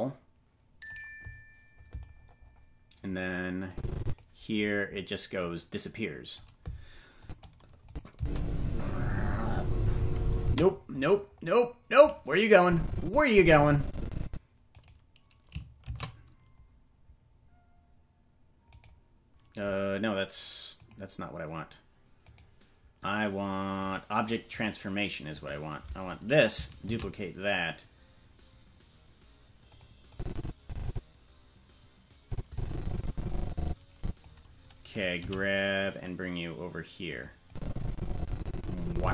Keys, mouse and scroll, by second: 2.0-2.6 scroll down 6, 3.7 click, 5.3-6.3 drag, 7.2 click, 7.8 click, 8.1 space, 10.4 space, 10.8-12.6 scroll up 6, 12.6-14.2 drag, 12.6 scroll up 1, 14.7-15.8 right drag, 15.8 shift+d, 20.7 click, 22.2-25.7 right drag, 26.8 shift+d, 30.1-34.2 drag, 35.1 g, 37.4-39.1 drag.